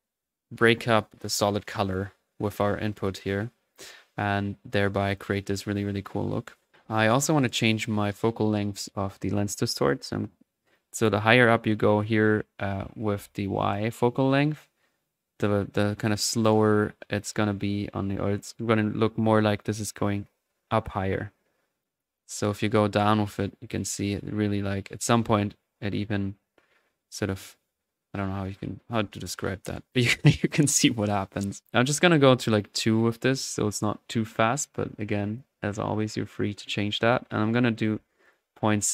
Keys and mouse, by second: 2.5-5.1 middle drag, 5.1-6.4 drag, 6.4 middle click, 6.7-10.0 drag, 10.7-21.2 drag, 21.8-35.8 drag, 36.8-38.9 drag.